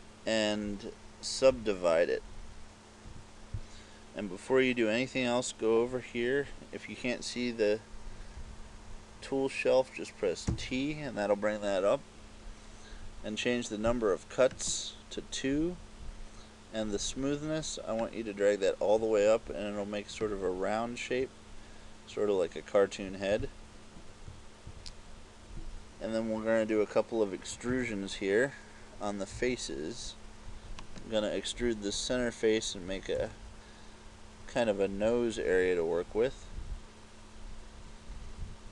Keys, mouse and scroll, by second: 1.6 w, 8.4 t, 10.6 t, 14.7 click, 18.2 click, 24.3 KP_4, 24.7 KP_4, 27.8 ctrl+Tab, 31.0 right click, 33.3 e.